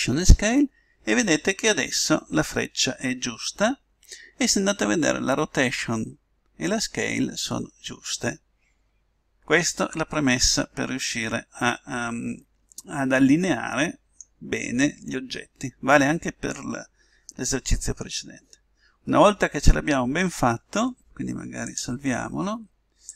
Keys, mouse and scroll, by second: 10.1 middle click, 11.3-13.1 middle drag, 15.1-16.9 middle drag, 18.4-21.7 middle drag, 21.7-23.1 drag.